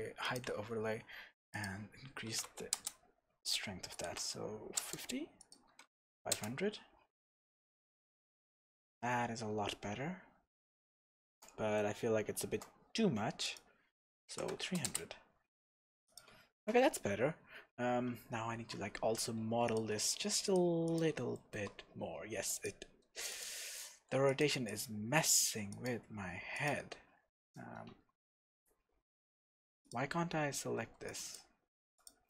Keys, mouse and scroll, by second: 0.2 click, 1.5-11.8 drag, 2.8 KP_Enter, 5.0 KP_Enter, 6.0 KP_0, 6.6 KP_Enter, 9.5-9.9 scroll down 2, 11.8-13.4 shift+middle drag, 13.4-16.2 drag, 14.6 KP_0, 15.1 KP_Enter, 17.1 scroll up 1, 18.5 shift+z, 18.9 scroll up 1, 19.6 click, 20.0-20.4 scroll up 1, 20.4 click, 20.8 click, 21.3-22.5 shift+middle drag, 21.7-22.5 scroll down 2, 22.5 drag, 22.8-23.3 scroll up 2, 23.3 click, 23.9-24.3 scroll up 2, 24.3 click, 24.7 click, 25.7 click, 26.5 click, 27.4 click, 27.9 Tab, 28.3-29.4 scroll down 2, 29.4 Tab, 29.8 click, 30.1 scroll up 2, 30.7 b, 31.6-32.0 scroll up 1, 32.0 click.